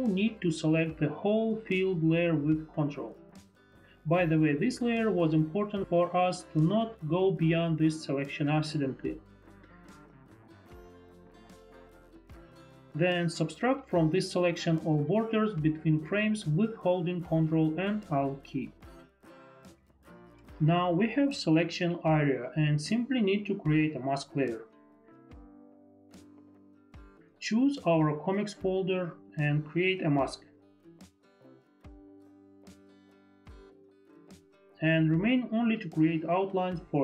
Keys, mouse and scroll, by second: 2.0 click, 3.3 click, 5.3 ctrl+click, 8.2 click, 8.8 click, 9.2 click, 9.3 click, 11.1 click, 16.1 ctrl+alt+click, 25.8 click, 26.4 click, 27.3 click, 28.3 click, 28.7 click, 33.4 click.